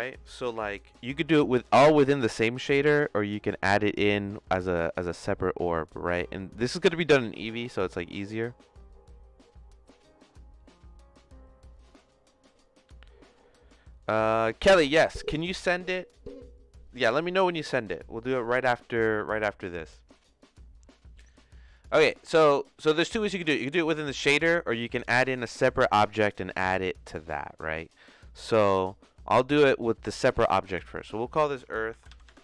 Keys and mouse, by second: 21.3 middle click, 22.9 click, 24.2 click, 24.8 click, 25.8 click, 28.3 middle click, 31.0-32.4 drag.